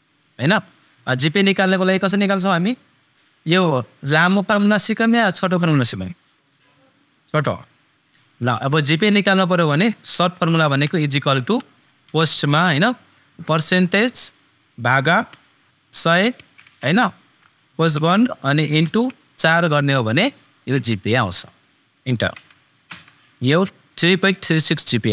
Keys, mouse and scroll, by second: 8.1 super+click, 10.7 super+=, 12.0 shift+super+9, 13.7 super+click, 17.3 super+click, 17.9 shift+super+0, 24.3 super+click.